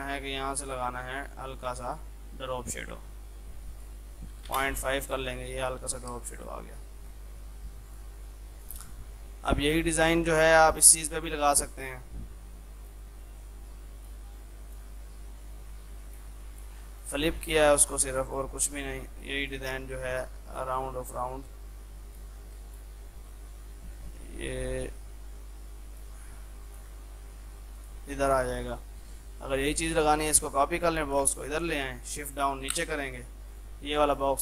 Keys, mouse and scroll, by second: 6.2 space, 6.4 click, 7.0 shift+F2, 7.4 F3, 7.9 click, 8.1 F2, 8.3-10.6 drag, 10.6 ctrl+right click, 11.5-17.0 drag, 17.0 right click, 17.8-26.8 drag, 27.3 F3, 27.8 click, 30.0 ctrl+right click, 31.1 shift+click, 31.4 c, 31.7 click, 32.7 shift+Page_Down, 33.6 click.